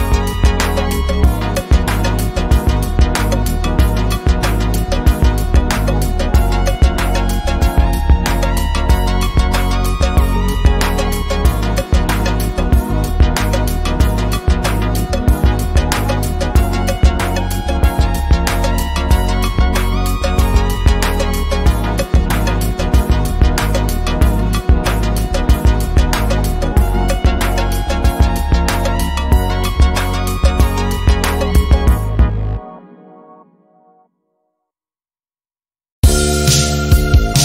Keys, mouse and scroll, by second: 0.5 ctrl+z, 1.6 click, 5.4 click, 5.5 ctrl+d, 6.5 click, 8.4 Delete, 9.5 Return, 10.9-16.0 drag, 16.3 Delete, 16.5-17.1 click, 17.0 Delete, 18.3 click, 19.7 ctrl+z, 20.6 r, 21.1-22.3 drag, 33.6-36.8 drag.